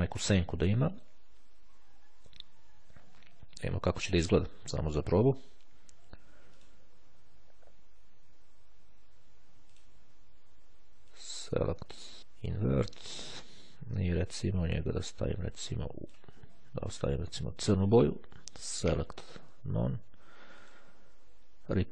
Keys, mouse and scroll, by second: 3.7 click, 6.6 shift+click, 9.8 click, 11.2 click, 12.6 click, 14.6-16.7 drag, 18.8 click, 19.8 click, 20.8 click, 21.7 click.